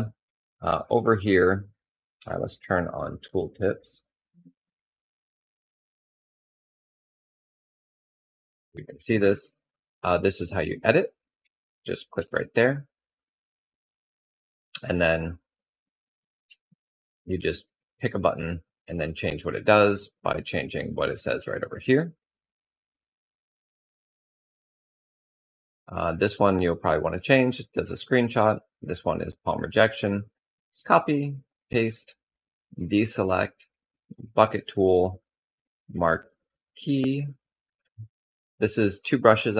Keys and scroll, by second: 11.7 e, 16.0 e, 39.3 typing.